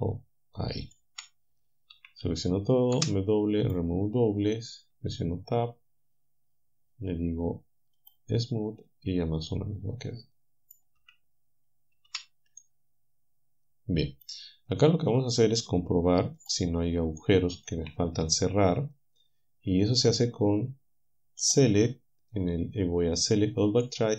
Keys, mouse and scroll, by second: 0.8 ctrl+click, 2.0 a, 2.3 a, 3.7 click, 5.0 Tab, 9.5-10.9 middle drag, 11.0 Tab, 12.1 a, 12.6-14.4 drag, 14.8 click, 16.4 click, 17.2 shift+click.